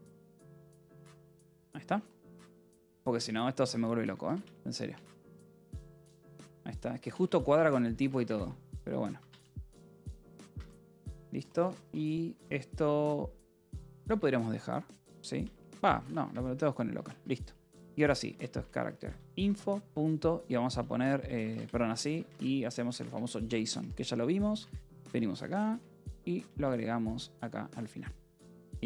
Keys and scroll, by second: 0.0-1.7 typing, 1.1 Escape, 3.0 v, 3.9 Escape, 4.1-12.2 typing, 10.4 Escape, 13.9 Escape, 14.3 j, 14.9 a, 15.5 BackSpace, 15.8 o, 16.1 Escape, 16.9-25.6 typing, 24.5 Return, 27.7-28.8 typing.